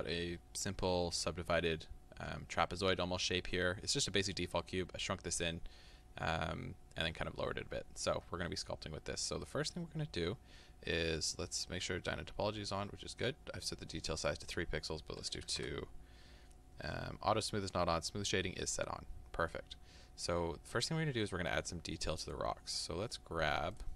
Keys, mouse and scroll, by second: 22.4-23.8 drag.